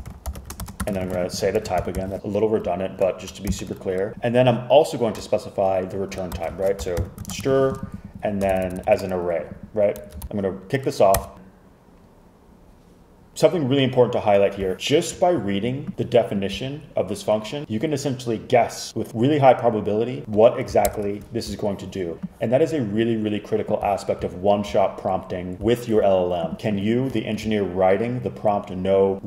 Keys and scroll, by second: 0.0-2.5 typing, 3.6 shift+0, 6.1-7.9 typing, 8.6 shift+Left, 8.7 shift+Left, 8.8 shift+Left, 10.1 Right, 11.2 Return, 20.9 super+Return.